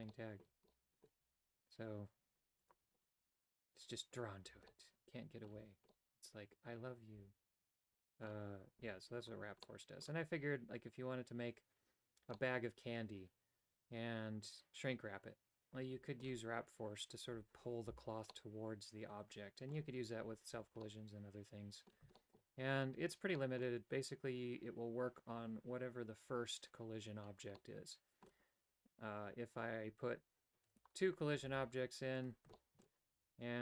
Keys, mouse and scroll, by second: 0.2 shift+middle click, 0.7 middle click, 1.4 g, 4.7 middle click, 5.9-8.4 middle drag, 9.2 right click, 9.7 middle click, 12.4-16.3 middle drag, 18.4-19.8 middle drag, 20.9-22.1 middle drag, 22.2 shift+middle click, 23.4 middle click, 27.7 middle click, 31.0 right click, 31.6 shift+d, 32.6 shift+middle click.